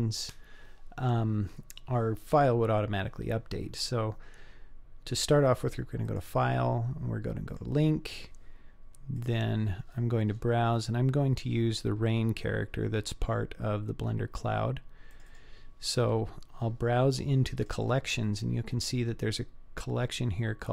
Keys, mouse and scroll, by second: 6.1-7.7 drag.